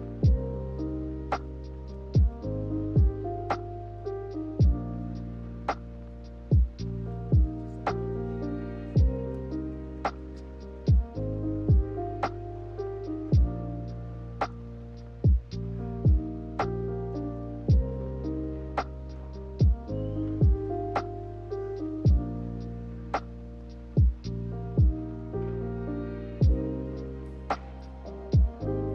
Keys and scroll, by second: 7.4 k, 21.6 k.